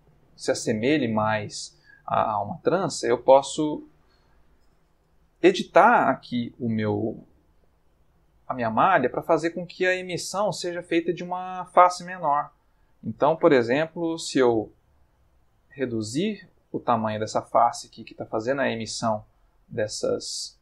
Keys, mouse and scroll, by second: 2.6 Tab, 3.3 Tab, 3.9 click, 5.0 Tab, 5.8 ctrl+middle click, 6.8-9.6 middle drag, 12.4 s, 13.0 Escape, 14.3 s, 17.9 click, 18.3 Tab, 19.3 ctrl+middle click, 20.0-20.6 ctrl+middle drag.